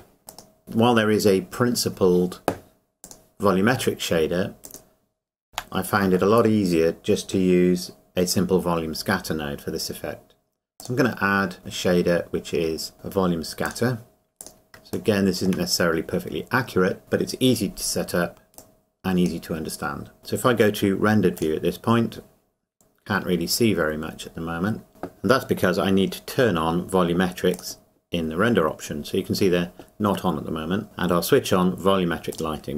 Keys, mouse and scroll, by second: 0.2 scroll up 1, 2.7-3.0 scroll up 1, 7.6 Delete, 10.8 click, 13.6 click, 15.7 scroll up 1, 18.6 click, 20.2 scroll up 1, 21.4 click, 24.9 click, 27.5 click, 30.8 click, 32.3 click.